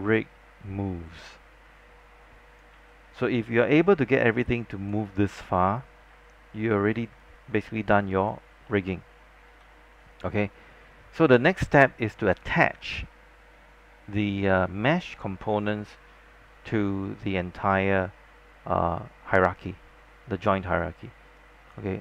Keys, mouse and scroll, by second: 2.8 z, 3.5 alt+click, 5.6 alt+middle click, 7.3 alt+click, 8.1 alt+click, 8.7 alt+middle click, 21.5 click.